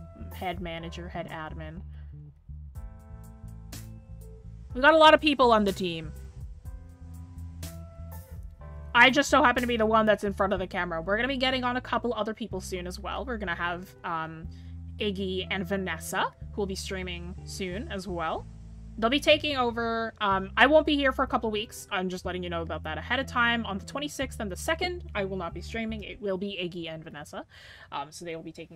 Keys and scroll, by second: 0.6 scroll, 11.4 scroll down 1, 12.7-13.0 scroll up 1, 13.0 scroll, 13.7 scroll up 1.